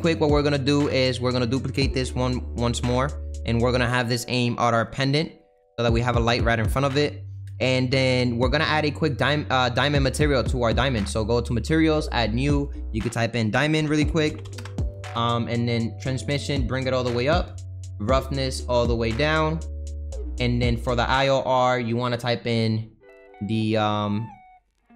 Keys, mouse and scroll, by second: 0.4-0.8 scroll down 2, 0.8 middle click, 1.3-2.2 scroll down 5, 2.2 alt+d, 4.2 click, 5.2-5.6 scroll up 5, 5.6 middle click, 6.2-6.6 scroll up 3, 6.6-8.3 middle drag, 8.3 click, 12.1-16.6 drag, 16.6-17.1 scroll down 4, 17.1-24.9 drag.